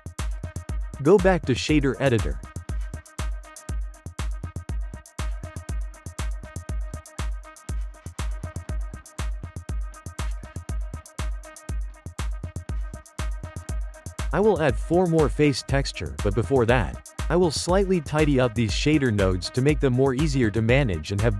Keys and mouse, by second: 1.4-4.3 drag, 4.4 Tab, 4.7 click, 5.4-6.4 ctrl+middle drag, 6.4 click, 7.2-8.4 ctrl+middle drag, 8.4-9.0 drag, 9.0-13.0 shift+middle drag, 13.0-14.4 drag, 13.5 g, 14.4-15.9 ctrl+middle drag, 15.9 click, 16.2 g, 17.4 ctrl+middle click, 18.0 g, 19.5-20.3 shift+middle drag, 20.3 click.